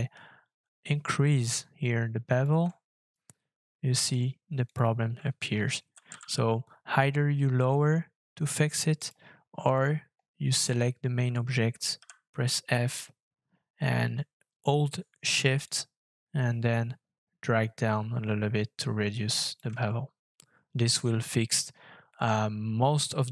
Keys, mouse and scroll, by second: 2.7 click, 2.7 shift+scroll down 3, 3.7-4.1 scroll up 2, 5.8 g, 6.1 z, 10.3-11.9 scroll down 3, 15.6 shift+click, 19.9 shift+scroll up 4, 21.1-21.6 scroll down 3, 21.6-23.3 scroll down 3.